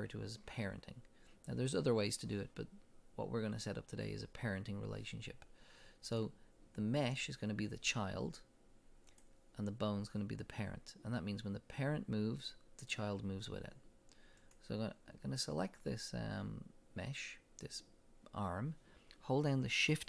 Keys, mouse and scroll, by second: 6.1 click, 9.1 click, 14.4 click.